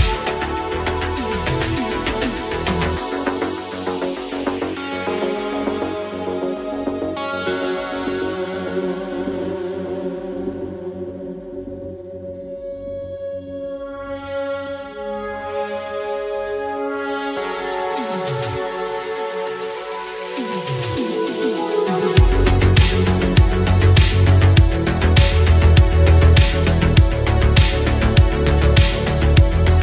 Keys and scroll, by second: 24.5 space.